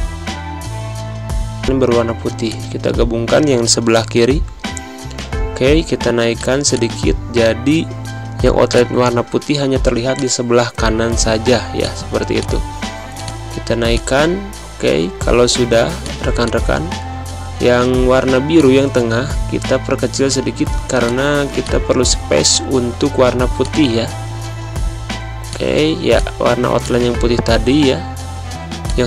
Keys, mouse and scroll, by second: 1.6 shift+click, 3.4 ctrl+], 6.2 click, 6.4 space, 6.6 click, 6.8 space, 8.3 z, 8.6 click, 9.5 v, 10.0 click, 13.5 z, 13.8-15.3 drag, 15.3 space, 15.4 v, 15.9 click, 18.4-19.8 drag, 19.8 z, 20.1 click, 20.7 space, 20.9 click, 21.1 space, 21.4 click, 22.0 v, 22.4-27.5 drag, 27.5 ctrl+z, 28.7 click.